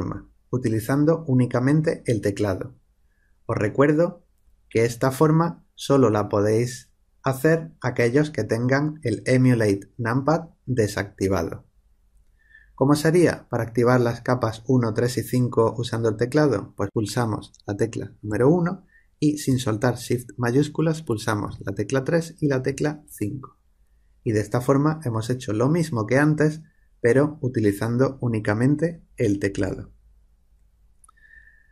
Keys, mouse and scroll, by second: 18.2 1, 21.4 shift+3, 22.7 shift+5.